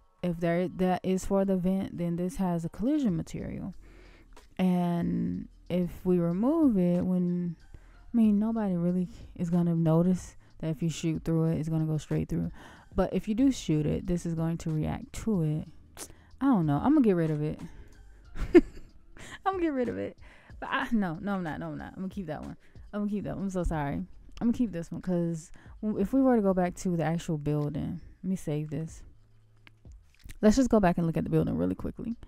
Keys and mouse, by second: 15.0-16.6 middle drag, 17.2 x, 21.6 ctrl+z.